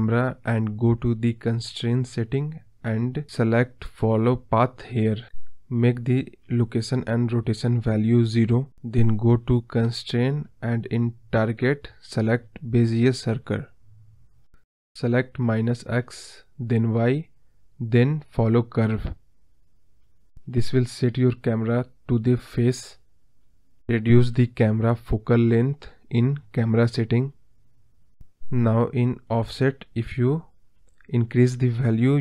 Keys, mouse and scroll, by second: 0.5-1.1 drag, 2.4 click, 2.9 click, 3.4 scroll down 4, 5.4 click, 6.1-9.8 drag, 9.8-10.5 scroll up 6, 10.5-11.0 scroll down 4, 11.4 click, 12.3 click, 13.2 scroll up 2, 13.3 middle drag, 13.5 scroll down 4, 13.7-14.0 middle drag, 14.0 scroll up 3, 14.4-16.0 middle drag, 16.4 click, 17.1 click, 17.7 click, 18.0 click, 18.7 click, 19.2 click, 19.7 click, 20.3 click, 21.6 click, 22.1 scroll up 3, 22.3-23.3 middle drag, 23.3 KP_0, 24.5 click, 25.0-26.6 drag, 29.4 click, 29.9-31.5 drag.